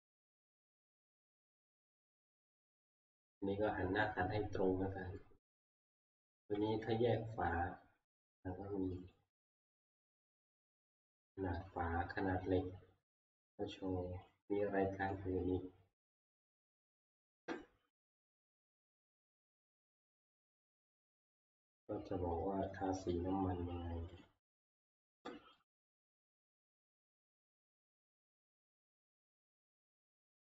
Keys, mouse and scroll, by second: 3.1 click, 4.6-5.4 scroll, 5.6-6.1 scroll, 6.6 t, 7.8 click, 9.1 click, 9.9 middle click, 10.1 click, 11.7 middle click, 14.5 click, 15.0 click, 16.1 middle click, 16.1 click, 17.1 click, 17.1 middle click, 18.1 click, 18.9 click, 19.1 click, 21.2 scroll, 22.8 click, 23.0 click, 24.2 click, 25.1 click, 25.7 click, 27.1 click, 30.4 click.